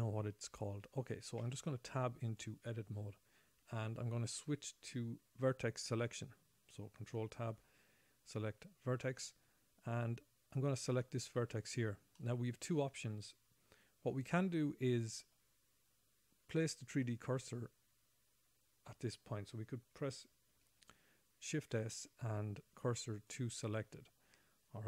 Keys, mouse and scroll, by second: 1.8 Tab, 3.5-4.9 scroll up 4, 4.9-5.3 scroll up 3, 7.9 ctrl+Tab, 10.9 click, 12.5 middle click, 22.0 shift+s.